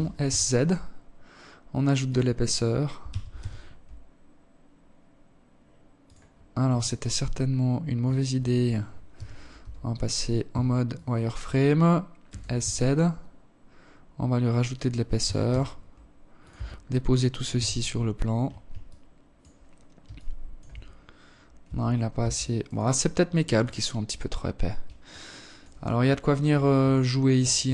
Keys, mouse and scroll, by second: 1.4 g, 5.1 alt+right click, 7.4 z, 8.0 a, 8.8 b, 10.6 s, 13.5 g, 14.8 Tab, 15.8 z, 17.2 alt+click, 18.4 alt+shift+click, 19.2-20.0 scroll up 2, 20.0 Tab, 20.6 Tab, 21.0 right click, 21.6 right click, 22.0 right click, 23.4 alt+click, 24.2 alt+shift+click, 27.6 KP_7.